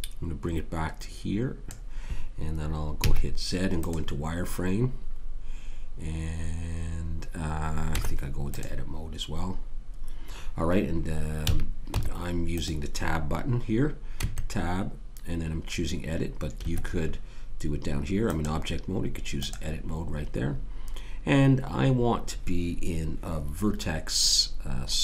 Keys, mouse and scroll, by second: 3.0 z, 7.9 Tab, 11.4 a, 11.9 Tab, 14.5 Tab, 18.3 click.